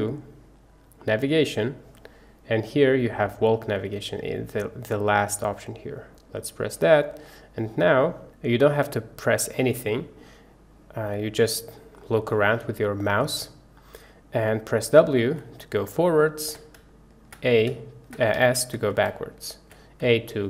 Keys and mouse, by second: 6.2 middle click, 6.7 click, 6.9 middle click, 6.9-20.4 drag.